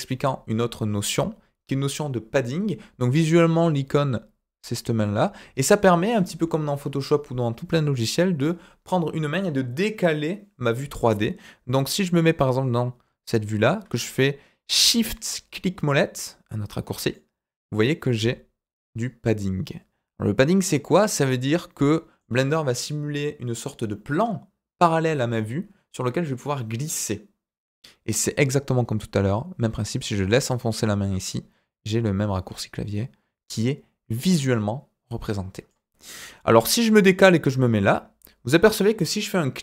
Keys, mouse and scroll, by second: 12.1-13.6 middle drag, 17.1-22.1 shift+middle drag, 29.8-35.6 drag, 36.7-37.4 middle drag, 37.6-38.4 shift+middle drag.